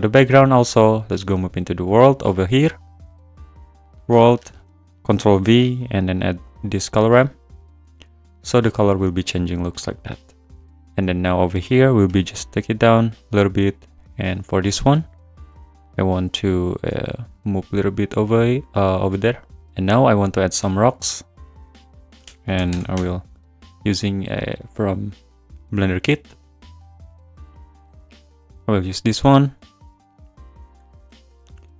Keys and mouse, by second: 2.8-3.5 drag, 4.6 click, 5.4 ctrl+v, 6.1 click, 8.8 click, 11.1 click, 12.0 g, 13.5 click, 14.1 click, 14.9 `, 15.5 `, 16.9 g, 19.6 `, 21.3-23.0 drag, 23.0 Return, 24.6 click, 26.2 click, 30.3 click, 31.4 shift+d.